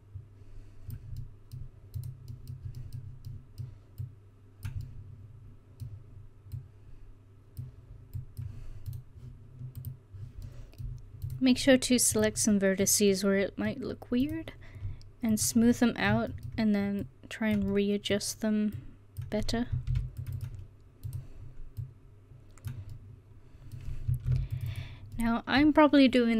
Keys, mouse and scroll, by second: 1.3 middle click, 2.0 right click, 2.9-4.1 middle drag, 10.5 middle click, 12.7 middle click, 13.3-14.3 middle drag, 14.3-15.8 right drag, 15.4 click, 15.8-17.1 middle drag, 19.9 ctrl+r, 24.3 ctrl+r.